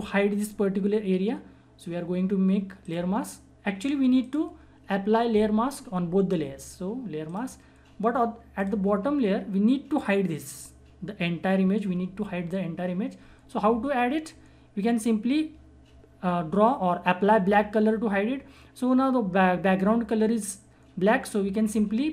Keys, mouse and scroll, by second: 2.8 click, 7.2 click.